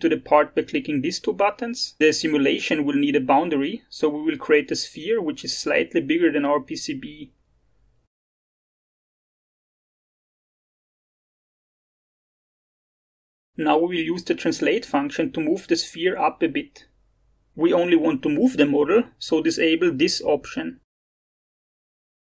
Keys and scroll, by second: 10.0 0, 10.2 ., 10.5 0, 10.7 5.